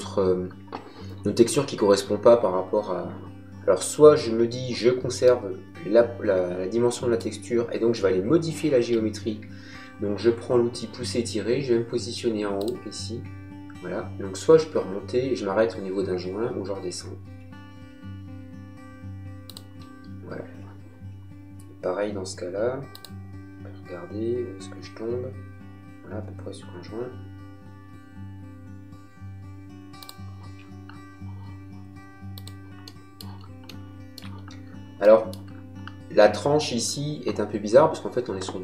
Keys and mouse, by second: 5.1 middle click, 8.7 p, 12.5 click, 19.4 click, 22.9 click, 29.9 click, 32.3 click, 32.8 middle click.